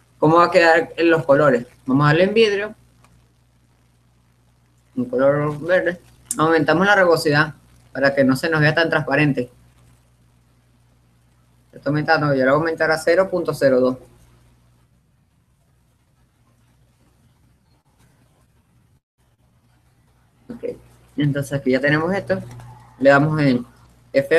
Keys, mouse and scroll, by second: 3.7-5.1 drag, 7.7-9.3 drag, 21.0-22.9 middle drag.